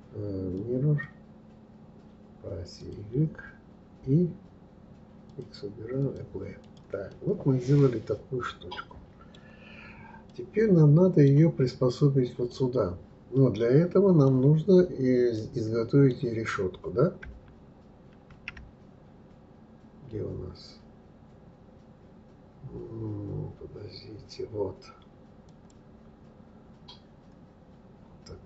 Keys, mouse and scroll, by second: 2.8 click, 5.3 click, 6.0 click, 6.6 click, 7.1-10.0 middle drag, 10.2-18.3 middle drag, 18.3 shift+a, 27.7-28.0 scroll down 1.